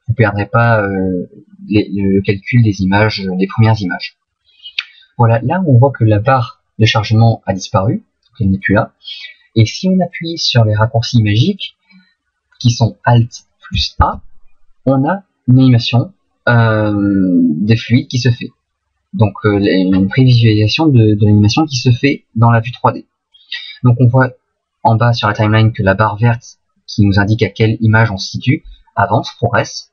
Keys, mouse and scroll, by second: 14.0 alt+a.